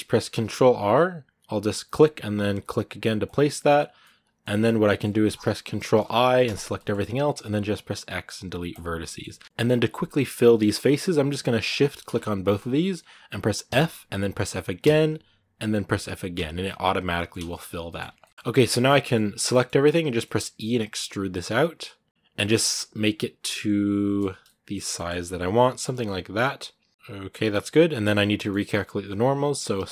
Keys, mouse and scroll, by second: 0.0 ctrl+r, 3.8 scroll down 1, 3.8 middle click, 4.6 scroll down 1, 4.6-5.7 middle drag, 5.7 ctrl+i, 6.5 middle click, 6.7 scroll up 2, 8.6 x, 8.8 middle click, 9.0 scroll up 1, 9.2 a, 9.3 middle click, 9.4 ctrl+z, 10.1-13.5 right drag, 13.5 f, 16.4-17.5 middle drag, 17.5 a, 17.7 middle click, 17.9 a, 18.0-19.9 middle drag, 19.9 e, 22.5-24.7 middle drag, 24.7 g, 25.8-27.7 middle drag, 27.7 a, 28.0 scroll up 1, 28.2-29.6 middle drag, 29.6 a.